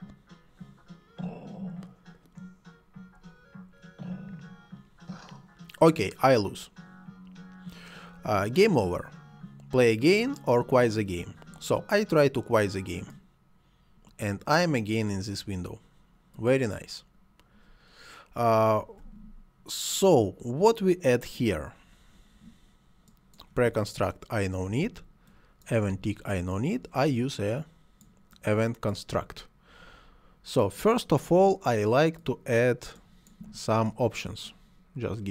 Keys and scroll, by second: 24.7 Delete.